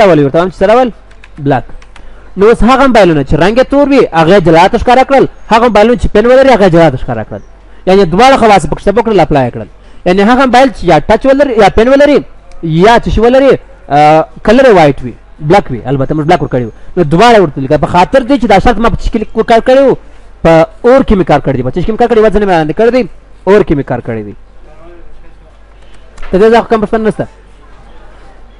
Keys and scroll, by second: 10.2 F9.